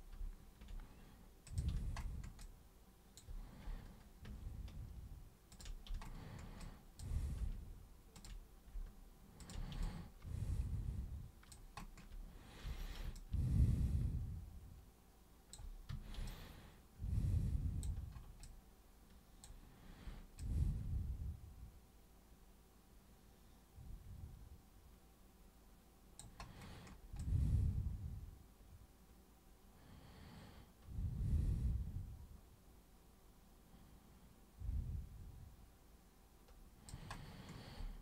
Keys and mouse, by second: 1.4 super+click, 2.4 alt+super+click, 5.5 ctrl+super+click, 6.6 alt+super+click, 8.2 ctrl+super+click, 9.4 ctrl+super+click, 9.8-11.5 alt+super+drag, 12.7 super+3, 13.1-15.5 alt+super+drag, 15.9 super+1, 16.2-17.8 alt+super+drag, 18.5 alt+super+click, 20.4-26.2 alt+super+drag, 27.2-28.9 alt+super+drag, 32.6-36.9 alt+super+drag.